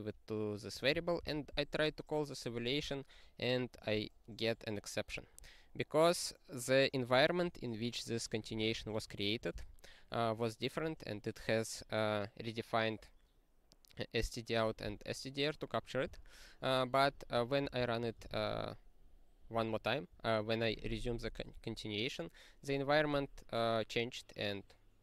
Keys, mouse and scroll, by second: 0.7 click, 1.2 ctrl+e, 3.7 click, 5.1 click, 8.3 click, 8.4 click, 8.7 ctrl+space, 8.8 ctrl+a, 9.5 ctrl+g, 10.8 click, 16.0 q, 17.0 click, 17.6 ctrl+space, 17.8 ctrl+p, 18.2 ctrl+g.